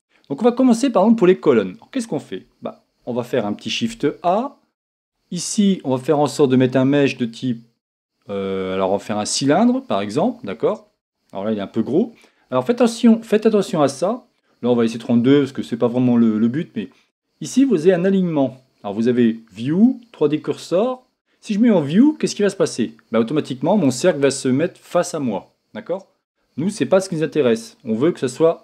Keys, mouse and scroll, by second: 22.8-28.6 drag.